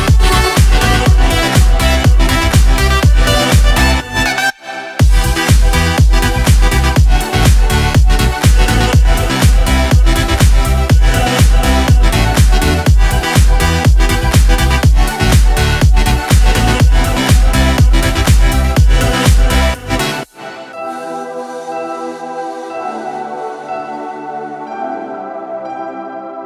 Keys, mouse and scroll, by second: 0.2 click, 6.0 click, 9.4 click, 9.8 click, 10.3 click, 11.0-13.1 drag, 14.5 ctrl+x, 15.5 click, 16.2 ctrl+v, 17.7 click, 18.7 click, 22.1 click, 23.7 click, 24.8 click, 26.2 click.